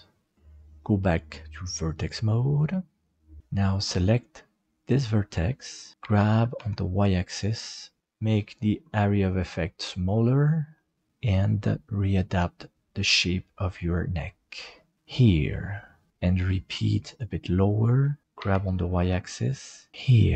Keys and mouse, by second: 1.8 click, 2.6 middle click, 4.6 right click, 6.0 g, 16.2 middle click, 17.0 right click, 17.5 middle click, 18.4 g, 19.9 middle click.